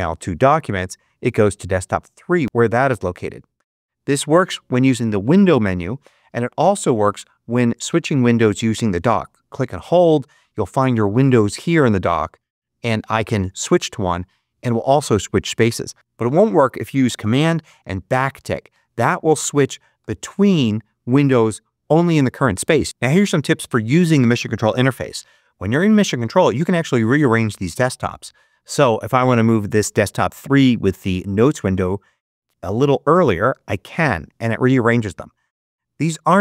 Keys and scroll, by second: 18.0 super+`.